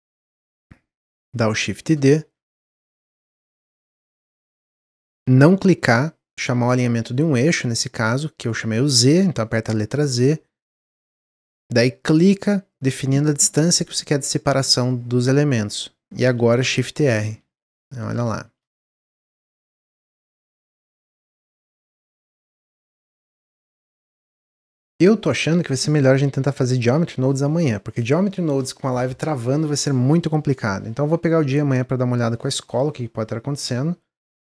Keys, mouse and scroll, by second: 2.0-3.3 middle drag, 3.3 x, 4.1 click, 5.0 shift+d, 16.7-18.4 typing, 21.7 click, 22.0-26.6 middle drag.